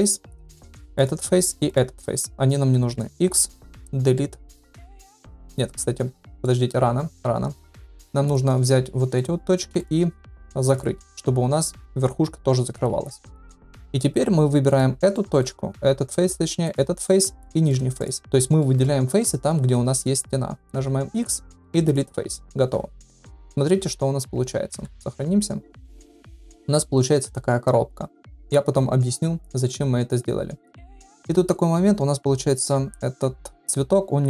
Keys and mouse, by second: 1.6 shift+click, 3.1 x, 6.2 shift+middle click, 7.2 1, 8.2 click, 9.2 shift+click, 12.9 f, 13.4 middle click, 13.9 3, 14.6 click, 15.1 middle click, 17.0 shift+middle click, 17.4 middle click, 18.0 shift+click, 18.6 middle click, 20.7 x, 23.4 KP_Divide, 24.7 ctrl+s, 25.2 Tab, 25.8 middle click, 25.9-26.6 middle drag, 27.2-28.5 middle drag, 29.6-30.2 middle drag, 31.0 shift+middle drag.